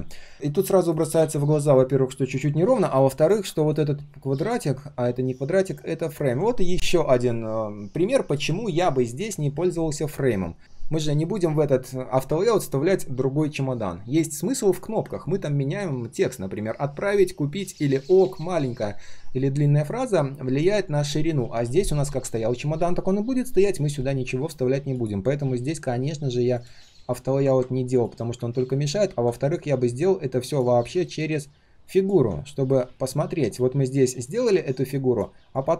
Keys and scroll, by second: 4.5 ctrl+z.